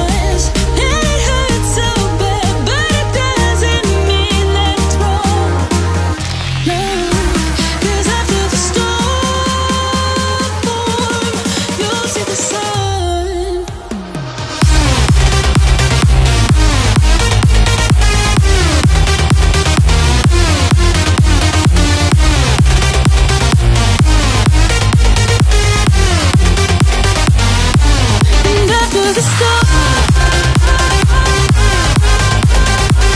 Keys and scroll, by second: 0.1 x, 6.2 BackSpace, 6.4 BackSpace, 7.9 BackSpace, 9.0 Caps_Lock, 9.3 c, 9.9 t, 16.5-18.4 typing, 19.5-26.5 typing.